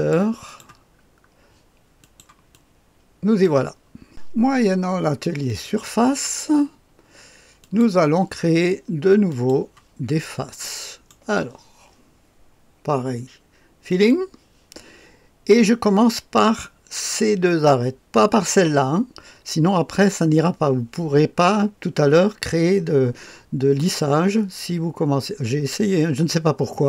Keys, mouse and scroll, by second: 0.4 click, 2.0 click, 2.5 click, 5.4 click, 7.5 click, 9.2 click, 10.6 right click, 13.8 click.